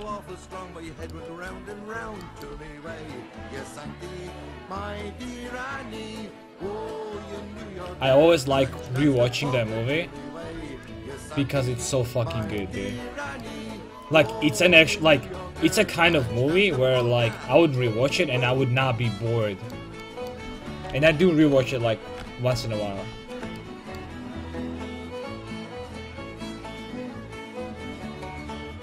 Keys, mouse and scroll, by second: 2.5 c, 10.6 c, 12.8 x, 20.9 KP_5, 21.1 KP_1, 21.4 KP_5, 22.5 KP_3, 26.4-28.3 middle drag.